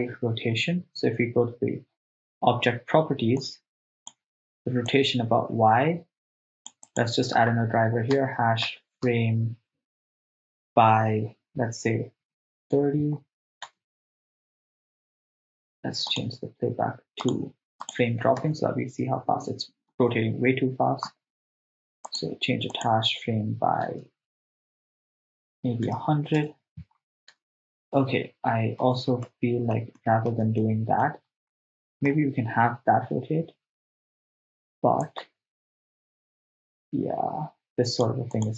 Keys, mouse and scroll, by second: 3.4 click, 4.9-6.7 drag, 6.9-12.8 drag, 13.2-13.6 scroll up 1, 13.6 scroll down 1, 13.8 shift+space, 15.5 shift+space, 18.3 click, 18.5 shift+space, 20.0 shift+space, 22.1-26.5 drag, 24.0 BackSpace, 26.1 0, 27.4 shift+space, 28.9 shift+space, 29.3 ctrl+middle click, 30.0 middle click, 30.7 ctrl+middle click, 31.9 middle click, 35.0-38.1 drag, 38.3-38.5 drag.